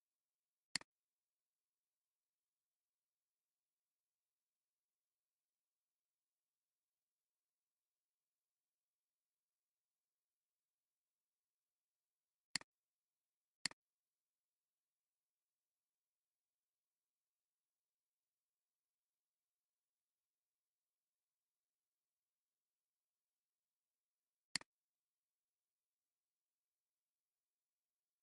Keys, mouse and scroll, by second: 19.8 scroll down 1, 20.2 scroll up 1, 28.1-28.2 typing.